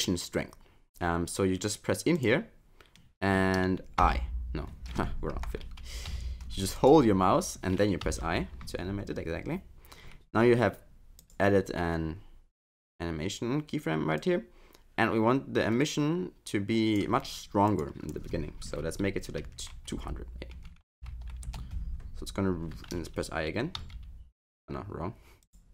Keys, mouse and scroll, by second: 2.2 click, 8.1 i, 11.2 click, 14.2 click, 17.7 click, 21.0 0, 23.8 i, 25.4 click.